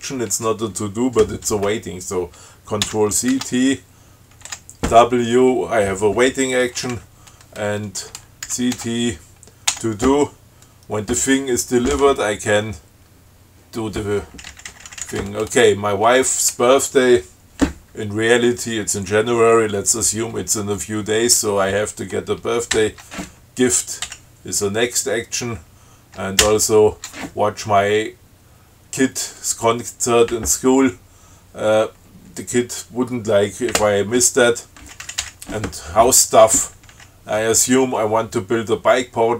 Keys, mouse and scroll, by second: 3.0 ctrl+c, 3.5 ctrl+t, 4.7 w, 6.9 Down, 8.7 ctrl+c, 8.9 ctrl+t, 9.9 t, 14.7 Down, 15.2 Down, 22.9 shift+Right, 24.3 Down, 26.6 shift+Right, 35.0 Down, 37.1 Down.